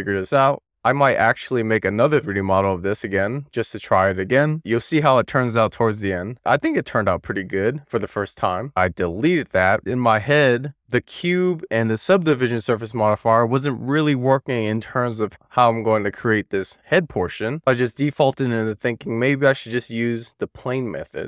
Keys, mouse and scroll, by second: 7.2 alt+z, 7.3 alt+middle click, 8.1-8.5 scroll up 1, 8.5 x, 17.9 shift+a.